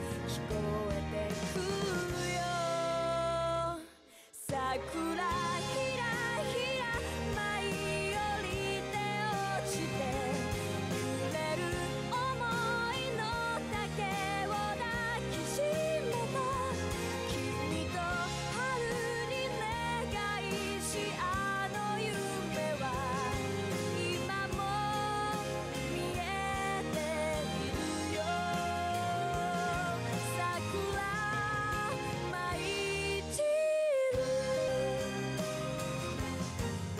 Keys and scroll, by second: 19.2-20.5 typing.